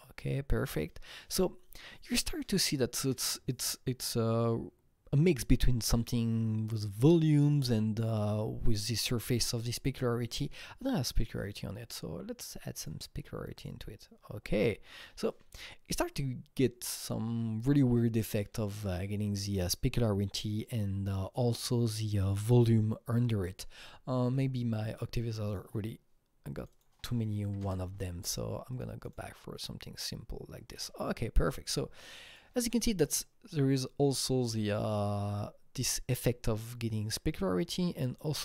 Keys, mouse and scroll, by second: 10.3 KP_Enter, 10.3 click, 11.2 click, 12.5-16.2 drag, 24.3-25.5 drag, 25.5 click, 25.6 click, 26.6 click, 26.7 double click, 27.4 KP_5, 27.6 Return, 28.7 click, 29.0 click, 30.5 KP_Enter, 33.2 click, 33.2-35.3 scroll up 4, 37.6 scroll down 1, 37.6-38.4 scroll down 2.